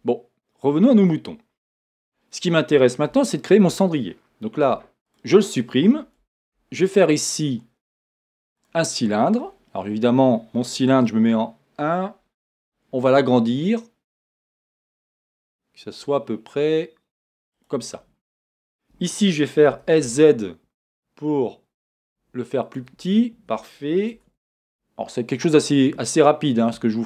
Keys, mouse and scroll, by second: 1.0 click, 2.1-3.2 scroll down 1, 3.2-4.7 shift+middle drag, 4.7 x, 6.4 shift+a, 9.4 scroll up 1, 9.9 scroll down 1, 11.3 KP_1, 12.5-17.6 middle drag, 12.5 s, 17.6 click, 19.6 s, 22.7 click, 23.0 middle click, 24.1 Tab.